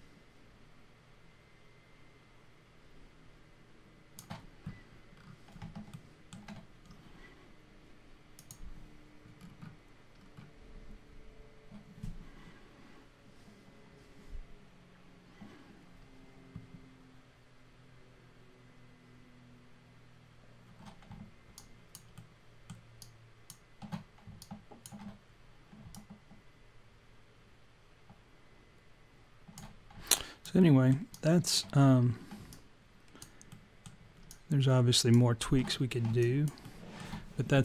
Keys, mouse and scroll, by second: 5.2-6.0 scroll down 4, 6.0 alt+middle click, 8.4 click, 9.4-10.0 scroll up 5, 10.2-11.4 scroll down 2, 21.6 alt+click, 22.2 alt+middle click, 23.0 alt+click, 24.4 alt+click, 25.9 alt+click, 30.2 alt+click, 30.6 alt+middle click, 31.1 alt+click, 32.1-32.6 scroll down 3, 32.6 alt+click, 33.5 alt+middle click, 34.3 alt+click, 35.7-36.3 scroll up 2, 36.3 alt+click, 36.3 scroll up 1, 36.6 alt+middle click.